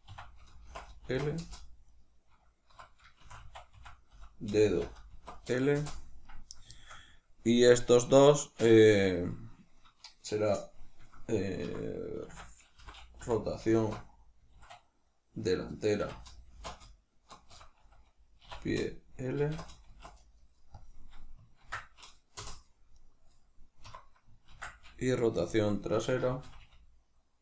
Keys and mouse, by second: 1.8 right click, 2.6 F2, 6.1 right click, 6.7-22.9 shift+middle drag, 11.5 F2, 22.9 right click, 23.7 F2, 26.5 BackSpace.